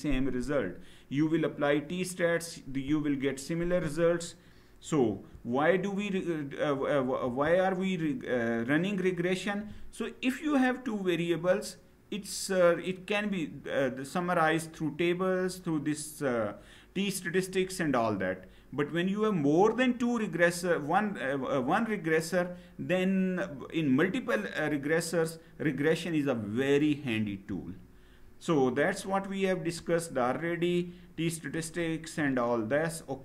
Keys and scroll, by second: 4.8 Down, 7.0 Left, 27.1 Down, 33.0 Down.